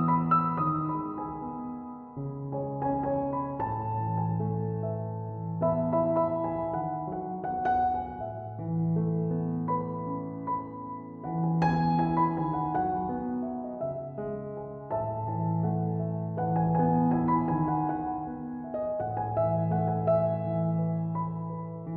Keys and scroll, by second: 2.0 typing, 11.7-12.4 typing.